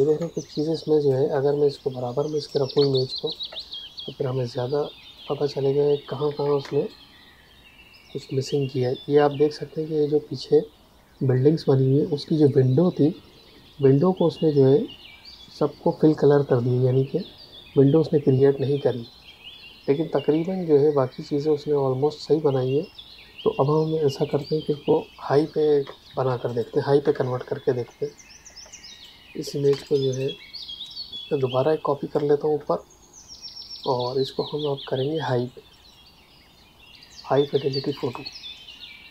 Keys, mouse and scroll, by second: 0.1 space, 0.3 click, 0.6 space, 1.7 click, 2.7 space, 2.9 click, 3.5 space, 3.6 click, 6.2 Tab, 6.5 space, 6.8 click, 7.1 space, 24.2 click, 25.7 space, 26.4 ctrl+alt+click, 28.8 click, 29.6 space, 29.8 click, 30.8 click, 33.6 click, 34.0 Tab, 35.7 click.